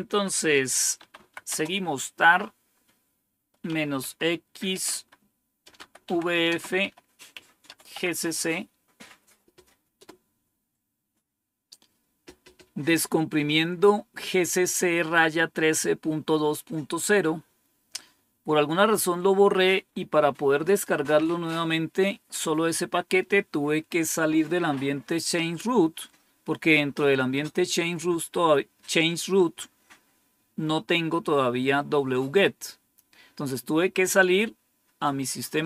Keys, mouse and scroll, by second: 0.7-1.9 typing, 3.3-8.3 typing, 9.9 typing.